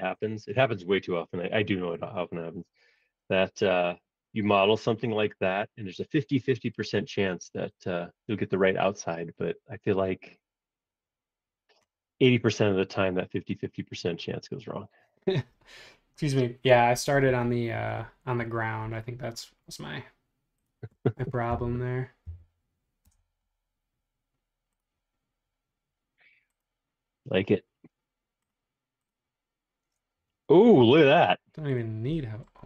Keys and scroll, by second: 2.1 space, 21.5 Page_Down, 22.2 Page_Up, 23.1 Return, 30.7 b.